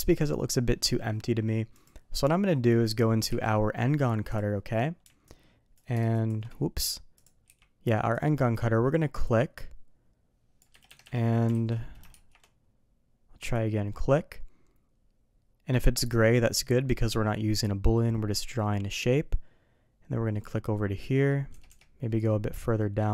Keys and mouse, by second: 3.2 d, 7.1 click, 7.4 d, 9.2-10.6 drag, 10.8 Escape, 11.0 Escape, 11.5 alt+a, 12.1 shift+2, 13.6-20.4 drag, 22.2-23.1 drag.